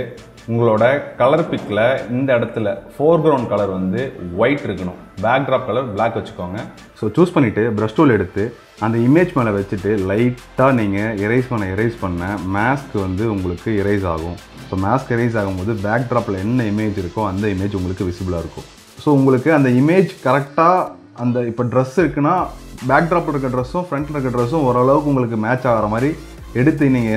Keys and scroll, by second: 16.3 ctrl+space.